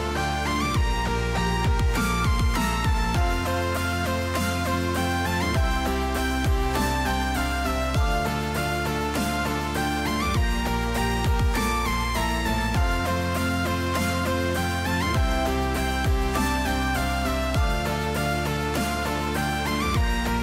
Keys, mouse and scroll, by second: 0.6 click, 1.6 s, 3.7 click, 4.5 s, 7.3 middle click, 8.4 click, 9.7 g, 13.4 r, 15.8 middle click, 16.7 s, 19.5 s.